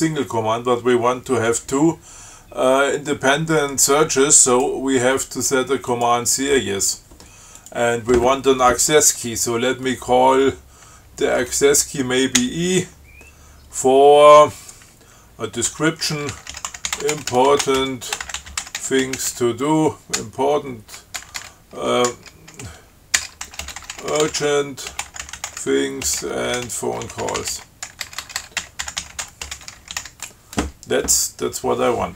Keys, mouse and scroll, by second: 4.7 click, 6.1 click, 7.8 click, 12.6 i, 15.9 Tab, 16.5-20.4 typing, 22.3-30.7 typing.